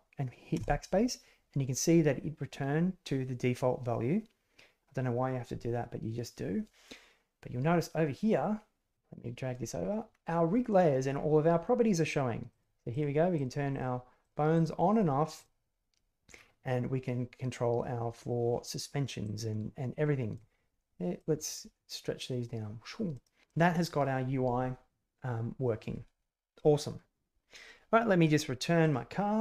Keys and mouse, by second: 8.9 click, 20.3 click, 21.7-23.3 drag.